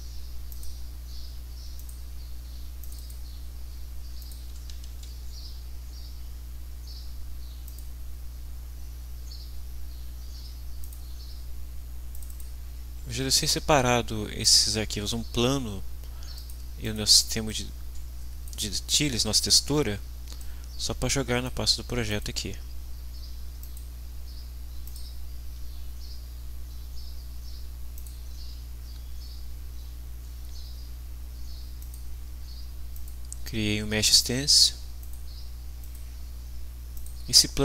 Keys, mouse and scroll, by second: 0.5 click, 1.8 click, 2.8 click, 4.2 click, 4.9 ctrl+s, 7.7 click, 10.8 click, 14.5 click, 16.3 click, 16.8 click, 17.5-18.6 drag, 20.4-21.6 drag, 22.1 click, 23.6 click, 24.9 click, 27.9 click, 31.8 click, 32.9 click, 35.0 click, 35.8 click, 36.9 click.